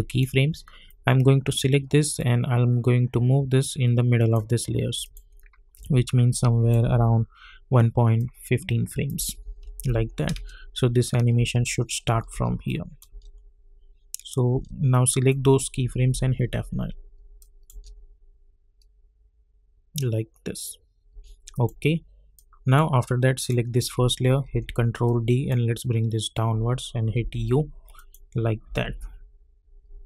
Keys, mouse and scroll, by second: 0.0-5.0 drag, 2.7 click, 5.7 =, 6.3 click, 6.8 =, 8.2 click, 9.1 -, 9.4 -, 10.3 space, 12.6 click, 13.1 space, 14.9 click, 16.1 F9, 17.4 click, 17.7 space, 21.1 space, 21.5 click, 24.4 ctrl+d, 25.3 click, 27.1 u, 27.9 click, 28.6 =, 28.8 =.